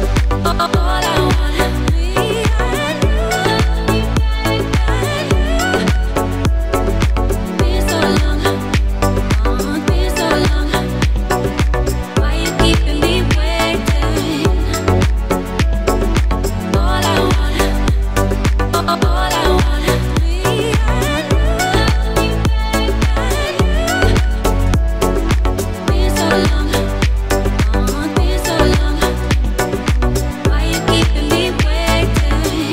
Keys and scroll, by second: 0.8 Tab, 4.1 KP_1, 5.3 Tab, 24.5 shift+d, 25.9 Escape, 27.7 p, 29.6 Tab.